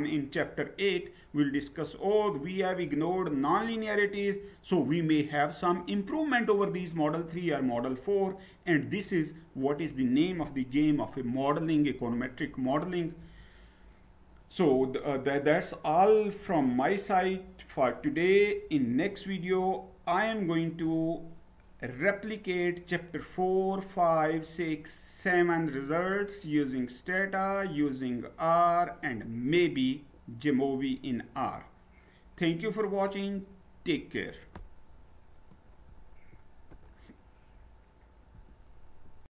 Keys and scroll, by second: 13.2 Down, 36.3 F9.